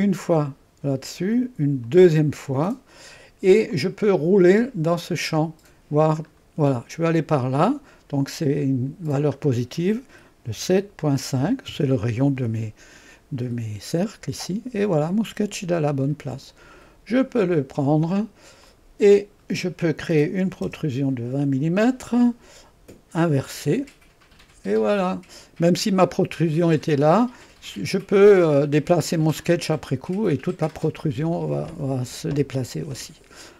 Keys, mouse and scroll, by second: 0.0 click, 1.9 click, 3.7 click, 4.4-5.3 scroll down 1, 5.3-6.0 scroll up 1, 6.9-8.2 scroll down 1, 8.2-8.7 scroll down 1, 8.7-10.5 scroll up 1, 10.5-11.4 typing, 11.7 Return, 14.0-17.3 drag, 18.7 click, 20.2-22.5 typing, 23.3-24.3 drag, 24.9 click, 27.6-29.3 typing, 27.9 click, 31.7-33.5 drag.